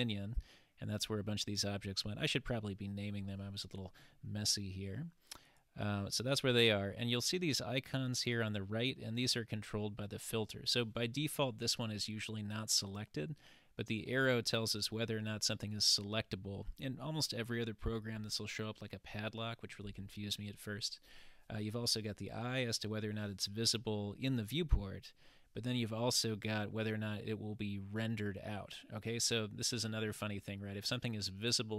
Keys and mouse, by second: 9.5-28.9 drag.